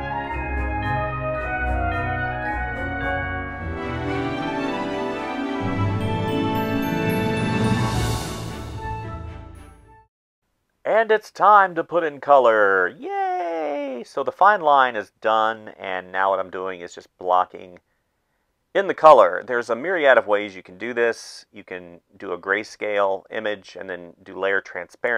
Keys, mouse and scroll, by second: 0.2-4.6 typing, 5.6 space, 6.2 ctrl+s, 6.7 space, 7.4 ctrl+z, 8.1 space, 8.3 space, 9.5 space, 10.4 space, 12.1-15.5 typing, 16.8 space, 17.1 space, 18.0 space, 19.3 space, 20.7 space, 21.4 ctrl+z, 21.9 space, 23.0 space, 24.3-25.1 typing.